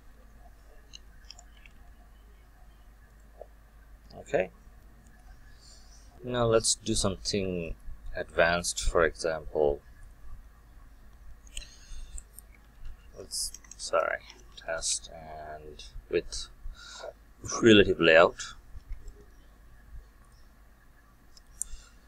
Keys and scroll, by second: 18.7 Return.